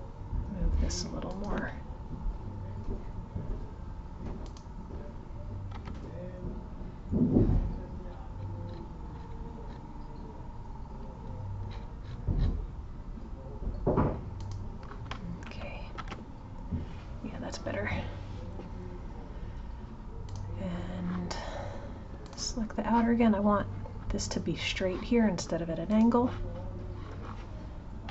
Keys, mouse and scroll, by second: 15.9 alt+h, 20.2 click, 22.2 click, 25.9-28.0 drag, 28.0 h.